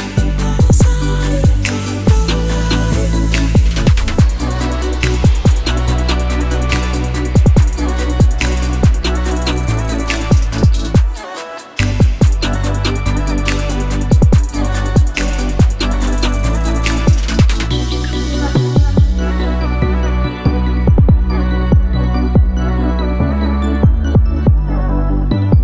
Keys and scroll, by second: 6.1 0, 6.4 shift+5, 6.6 shift+Return, 15.3 BackSpace, 15.6 2, 15.8 Return, 25.3 0.